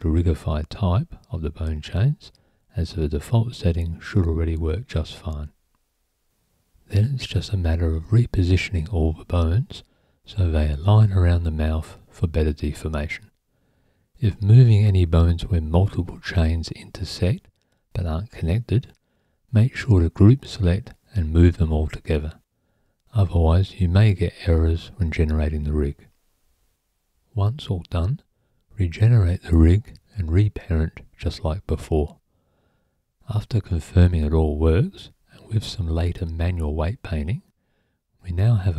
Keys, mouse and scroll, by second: 0.6 c, 1.1 click, 1.4 right click, 8.6 click, 9.2 click, 14.2 click, 14.6 click, 19.9 click, 21.6 click, 26.2 click, 28.6 Tab, 30.5 click, 31.6 click, 32.8 click, 34.5 click, 36.5 click.